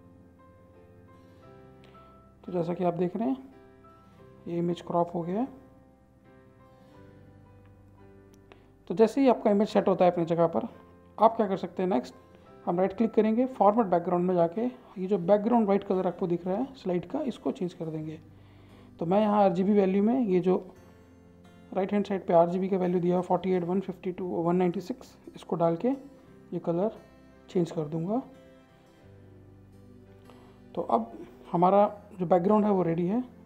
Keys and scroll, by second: 20.4-25.2 typing.